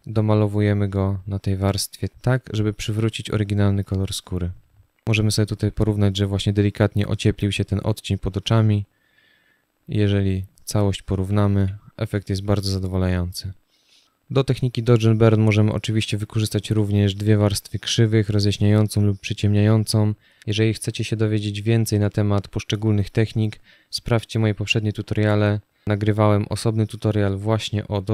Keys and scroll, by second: 11.2 z, 11.9 space.